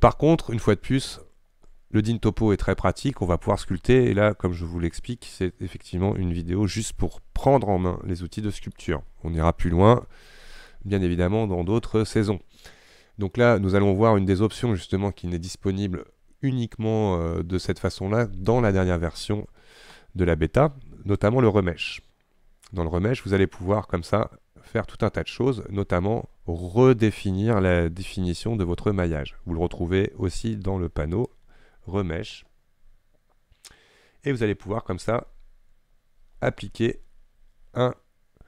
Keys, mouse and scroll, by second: 4.1-4.8 scroll down 4, 8.0-9.2 shift+middle drag, 9.2-10.1 scroll up 2, 10.1-20.2 shift+middle drag.